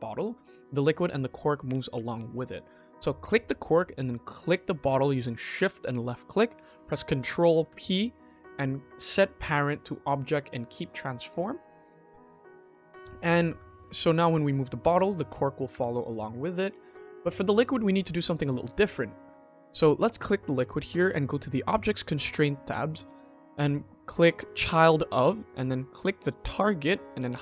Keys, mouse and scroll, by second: 3.1 click, 4.3 shift+click, 7.6 ctrl+p, 10.8 click, 13.6 click, 14.7 g, 15.9 r, 18.8 click, 19.2 click, 21.3 click, 22.7-24.6 drag, 26.3 click.